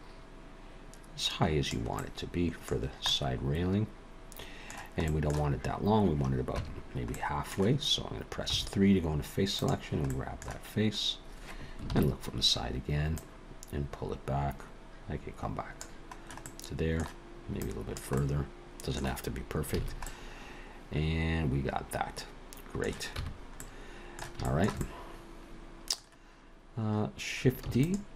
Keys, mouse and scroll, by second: 1.9 middle click, 2.8-5.0 scroll down 2, 3.1 middle click, 5.0 middle click, 6.6 Tab, 7.1 middle click, 8.5 3, 10.1 click, 10.1 middle click, 11.9 ctrl+KP_3, 13.2 click, 16.4 middle click, 17.6 click, 18.2 middle click, 19.7 alt+a, 20.0 middle click, 23.2 Tab, 23.6 middle click, 24.4 shift+middle click, 24.8 middle click, 27.7 shift+d.